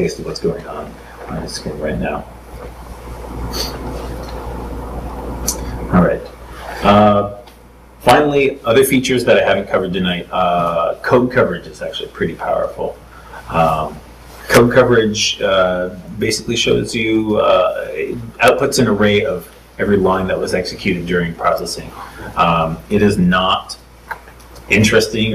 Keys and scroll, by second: 3.7 super+Tab.